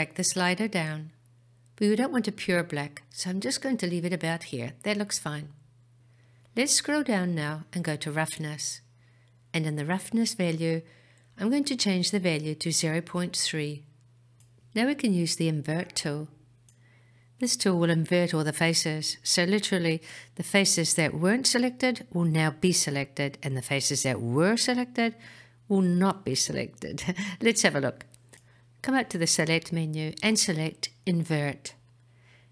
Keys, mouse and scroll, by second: 7.1-8.5 scroll down 3, 8.5-9.8 scroll down 1, 9.8-11.8 scroll down 1, 11.8-14.3 drag, 29.1-32.1 drag.